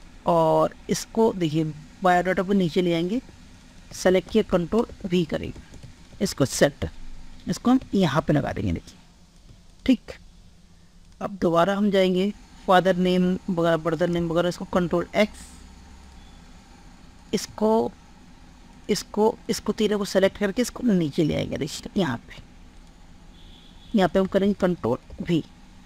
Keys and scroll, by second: 0.0 ctrl+x, 4.0 ctrl+a, 4.4 ctrl+v, 5.5 ctrl+space, 14.4 ctrl+x, 24.4 ctrl+a, 25.1 ctrl+v.